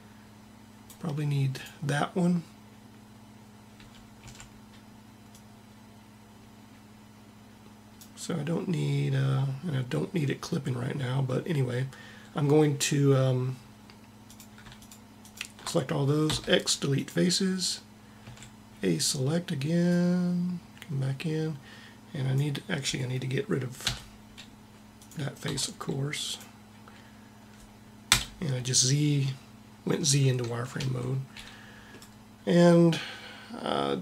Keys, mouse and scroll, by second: 3.8 a, 4.2 a, 5.3-6.5 drag, 14.3 click, 15.1-16.4 right drag, 16.4 x, 18.1 a, 23.9 z, 25.5 x, 28.2 z, 30.8 Tab.